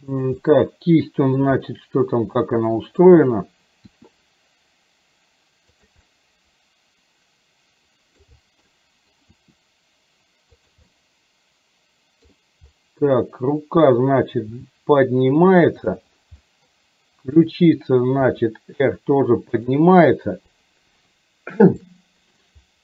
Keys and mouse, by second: 0.4 middle click, 2.5 middle click, 3.9 r, 6.0-8.3 middle drag, 8.9 middle click, 9.4 r, 10.9-12.4 middle drag, 14.5 g, 16.4 middle click, 17.4 click, 18.3 r, 21.9 middle click.